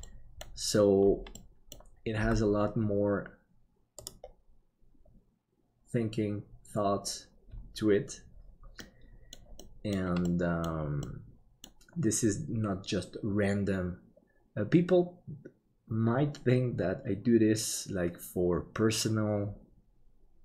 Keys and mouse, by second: 0.0 middle click, 1.5 middle click, 2.2 g, 8.9 middle click, 9.7 middle click, 10.4 middle click, 11.1-13.0 middle drag.